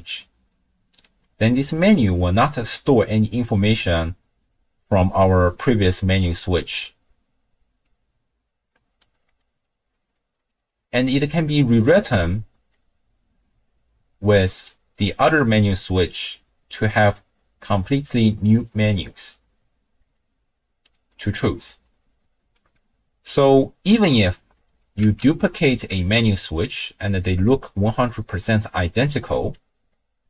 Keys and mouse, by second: 1.2-4.3 drag, 9.3 click, 10.4 click, 10.8 click, 12.8-14.6 drag, 16.1-20.1 drag, 23.3 click, 24.5 click, 25.0 ctrl+x, 25.4 click, 25.9 ctrl+shift+d.